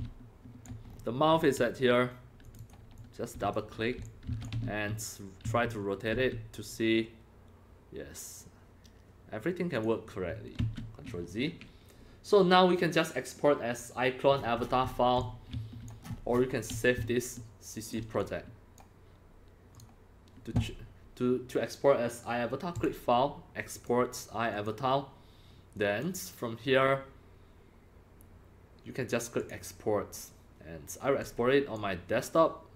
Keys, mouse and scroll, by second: 0.0-1.1 typing, 0.9 scroll, 0.9 scroll, 1.1 scroll, 1.3 scroll up 1, 1.4 scroll, 2.4 click, 2.6 click, 2.9-3.5 drag, 3.7 scroll down 4, 3.7-6.2 typing, 4.0 click, 6.7-9.8 drag, 10.6 ctrl+z, 14.3-14.9 scroll down 16, 14.9 scroll, 15.2-18.2 typing, 15.2-15.9 drag, 16.1-16.7 scroll, 16.8-17.9 drag, 18.2 click, 19.2-20.7 drag, 20.6-22.8 scroll down 1, 22.8 click, 22.8 scroll down 1, 23.7 click, 24.5 click, 25.8 drag, 29.4 click, 31.2 click.